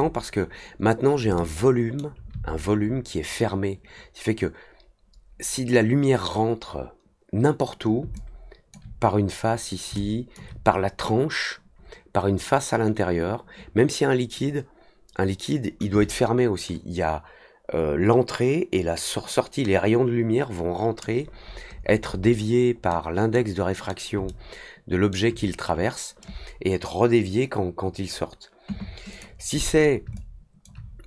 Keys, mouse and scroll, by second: 1.2-1.9 alt+middle drag, 2.3 alt+scroll up 1, 8.1-8.7 alt+drag, 9.9-10.3 alt+drag, 21.3-22.2 scroll down 3, 22.8-23.3 middle drag, 23.7 middle click, 24.2 alt+middle click, 29.0 click, 30.1-30.6 alt+drag.